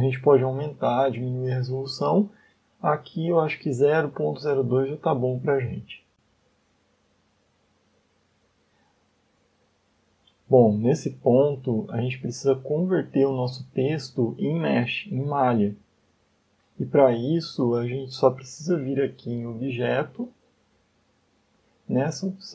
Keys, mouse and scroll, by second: 1.7 click, 1.9 click, 2.0 click, 2.3 click, 3.6 click, 4.1 click, 5.3 click, 6.1 middle click, 6.3 scroll up 2, 7.8 middle click, 9.2 scroll down 3, 9.7 middle click, 11.4 shift+middle click, 12.1 scroll down 1, 15.8 scroll up 2, 21.1 click.